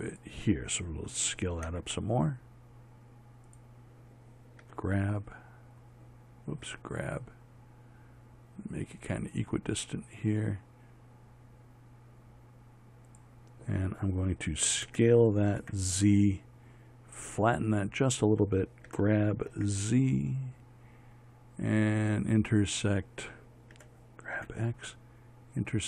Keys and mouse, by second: 2.2 s, 5.1 g, 7.2 g, 15.4 s, 19.4 g, 24.3 g.